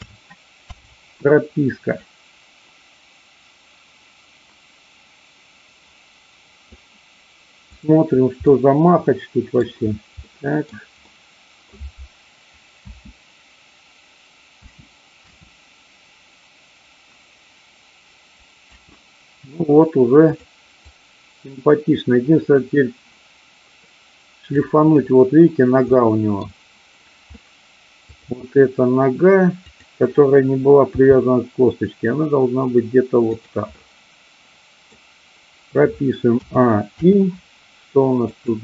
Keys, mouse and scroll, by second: 0.0 a, 0.6 i, 2.0-6.7 drag, 7.7 click, 8.4-9.6 middle drag, 10.4 middle click, 11.0-11.7 middle drag, 12.8 space, 18.6 space, 20.4 click, 20.8-24.6 drag, 26.0 middle click, 28.0 click, 29.7 click, 30.8 g, 33.2 click, 33.7-34.8 middle drag, 36.4 a, 36.8 i, 38.2 click.